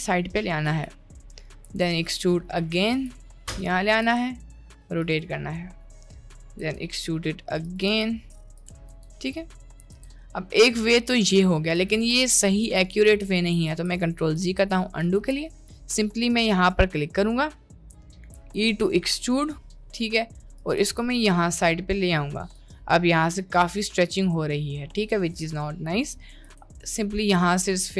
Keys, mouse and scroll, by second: 1.6 e, 3.0 g, 4.1 r, 6.6 e, 7.9 g, 8.9 t, 9.9 r, 12.0 ctrl+z, 12.4 ctrl+z, 12.6 ctrl+z, 12.8 ctrl+z, 13.1 ctrl+z, 13.3 ctrl+z, 13.7 ctrl+z, 14.0 ctrl+z, 14.3 ctrl+z, 15.2 ctrl+z, 15.8 click, 18.5 e, 20.9 g, 23.3 middle click, 23.5 Tab, 23.7-24.1 middle drag, 25.3 Tab, 26.5 r.